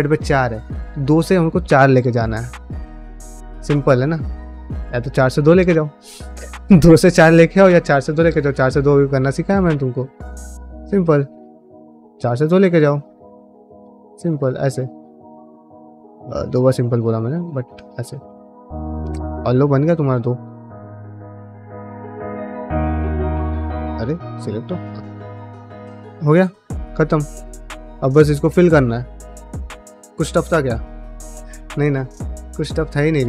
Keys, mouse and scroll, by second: 9.2 middle click, 10.1 2, 10.3 click, 10.6 e, 11.4 1, 11.6 click, 11.8 f, 12.9 click, 13.1 f, 14.4 click, 15.1 click, 15.3 middle click, 15.8 click, 16.3 click, 16.8 click, 17.2-20.8 typing, 18.3 click, 18.8 middle click, 19.5 click, 19.9 click, 20.6 click, 21.3 click, 22.2 click, 22.6 middle click, 23.1 click, 23.6 click, 24.1 f, 24.5 middle click, 24.9 click, 24.9 1, 25.0 g, 25.5 click, 25.7 g, 26.1 click, 26.6 click, 26.8 g, 27.3 ctrl+middle click, 27.6 middle click, 28.1 ctrl+middle click, 28.9 middle click, 29.4 middle click, 29.9-31.3 middle drag, 31.7 click, 31.9 g, 32.4 click, 32.5 g, 33.1 click.